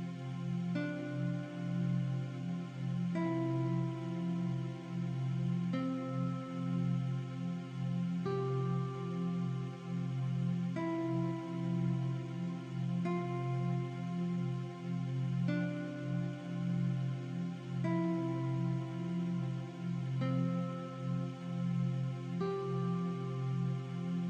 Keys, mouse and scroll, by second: 0.6 click, 1.5 KP_2, 2.1 click, 5.6 click, 6.1 KP_1, 6.7 click, 12.6 click, 13.3 KP_3, 14.2 click, 17.9 click, 21.5 click, 22.9 alt+shift+scroll down 1, 23.4-23.9 alt+shift+scroll up 2, 23.9 click.